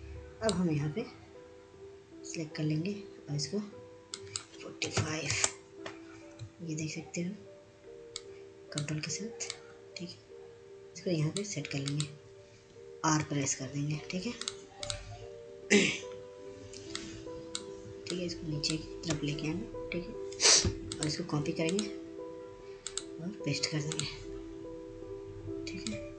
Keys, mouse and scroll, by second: 0.4-3.5 drag, 5.2-9.3 drag, 9.3-14.5 ctrl+drag, 14.6 r, 15.8-22.4 drag.